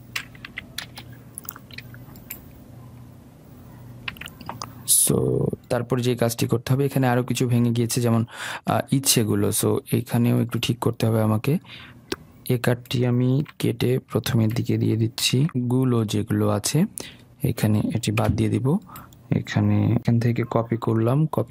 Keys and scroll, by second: 4.2 ctrl+v, 13.6 ctrl+x, 15.4 ctrl+v, 21.3 ctrl+c.